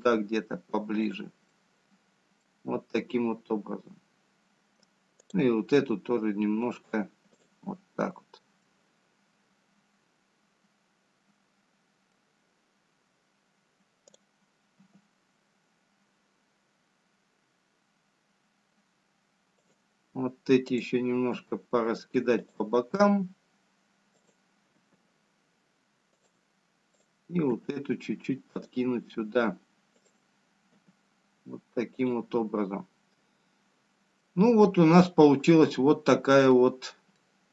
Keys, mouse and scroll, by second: 0.4 click, 2.2 g, 4.4 middle click, 9.9 click, 9.9 g, 10.5-11.5 scroll down 1, 13.0 middle click, 16.1 click, 16.9 g, 23.5 click, 23.5 g, 26.5 click, 27.4 g, 32.0 click, 33.4 g.